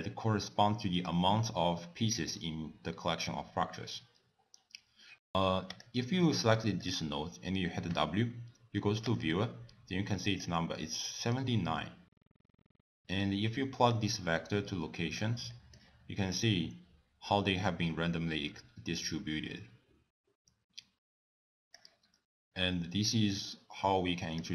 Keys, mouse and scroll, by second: 0.0 click, 5.7 click, 6.6 click, 6.8 click, 7.9 w, 10.9 middle click, 11.4-11.8 scroll up 2, 11.8 middle click, 12.2 click, 12.8 x, 12.8 middle click, 13.1-13.7 scroll down 3, 13.9 click, 15.5 middle click, 16.3 click, 23.3 click.